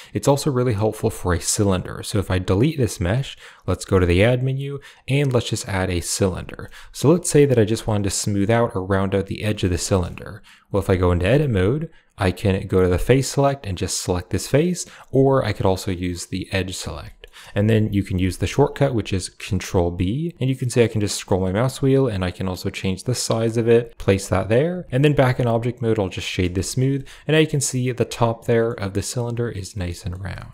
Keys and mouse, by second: 3.7 shift+a, 6.5 drag, 7.0 shift+click, 9.5 shift+middle drag, 9.8 middle click, 9.8 click, 10.6 Tab, 12.9 click, 13.9 click, 14.4 click, 16.9 middle click, 17.4 shift+middle click, 18.3 shift+middle click, 20.2 ctrl+b, 23.9 click, 24.6 Tab, 24.9 w, 26.5 shift+middle drag, 26.8-27.3 drag, 27.4 shift+click, 28.3 drag, 29.7 shift+middle drag, 30.2 shift+middle drag.